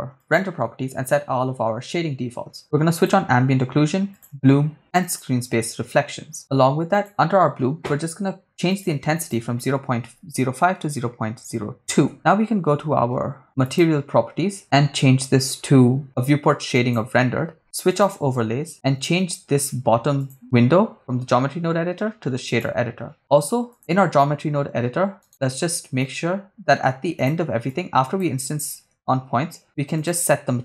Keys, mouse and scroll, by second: 0.2 click, 3.0 click, 4.2 click, 5.1 click, 6.9 click, 8.7-12.1 drag, 13.7 click, 17.1 click, 17.9 click, 20.2-22.6 drag, 23.2 click, 25.3 right click, 26.0 middle click, 27.7-28.2 drag, 29.1 shift+a.